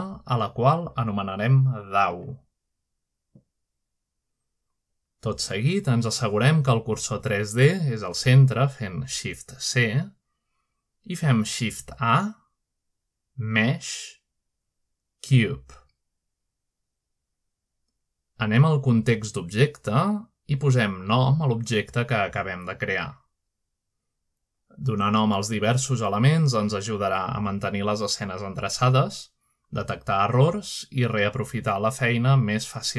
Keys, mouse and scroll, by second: 1.5-3.4 drag, 3.6-4.0 typing, 4.5 Return, 7.4 shift+right click, 7.8-8.8 right drag, 10.3-11.1 typing, 12.9 typing, 16.9 click, 18.4-19.2 shift+middle drag, 18.7-20.1 scroll up 1, 20.1-21.1 shift+middle drag, 21.3-22.3 drag, 22.3 click, 24.5-28.7 typing, 29.9-31.0 shift+middle drag, 31.0 typing.